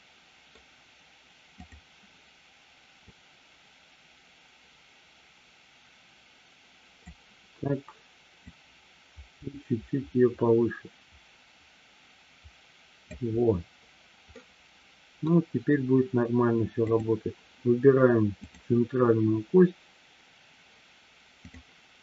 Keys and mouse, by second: 1.6 click, 3.6-7.4 drag, 8.4-13.7 drag, 14.3-15.3 middle drag, 16.9 click, 18.4-19.9 drag.